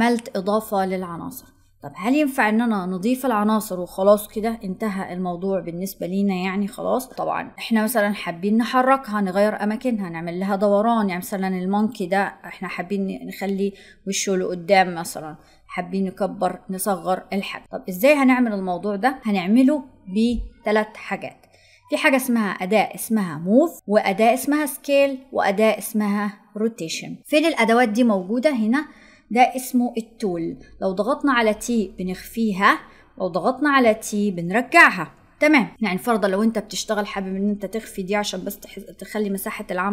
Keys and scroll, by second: 31.5 t.